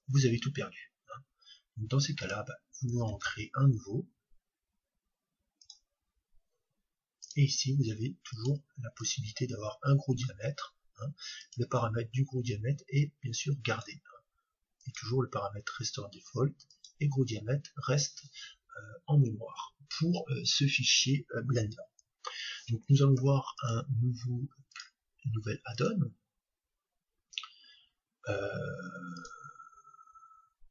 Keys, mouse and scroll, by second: 3.1 shift+a, 7.1-10.9 drag, 11.4-13.3 drag, 14.8-16.7 drag, 24.6-26.6 drag.